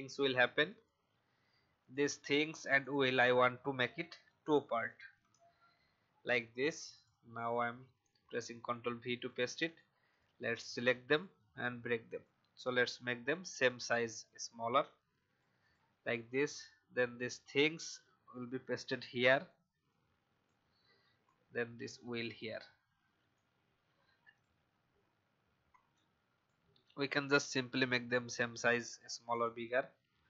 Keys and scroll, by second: 4.8 ctrl+x, 5.2 BackSpace, 7.6 ctrl+v.